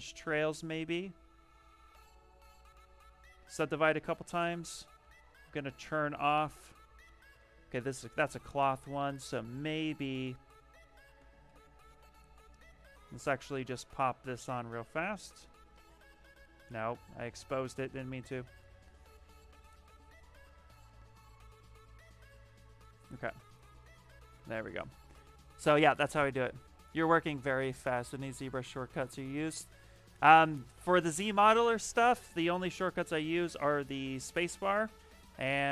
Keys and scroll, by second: 0.9 shift+f, 2.5 ctrl+z, 3.2 ctrl+d, 4.0 s, 4.9 x, 7.3 space, 8.2 b, 11.1 s, 11.4 t, 32.8 shift+f.